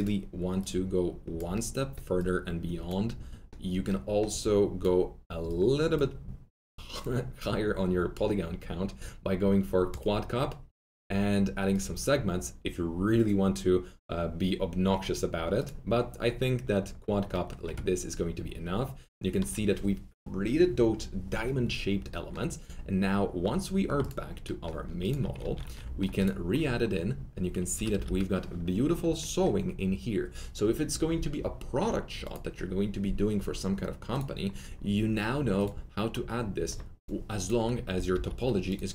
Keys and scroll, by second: 25.3-25.7 typing, 27.7 F3, 27.8-29.5 typing, 37.8-38.7 typing.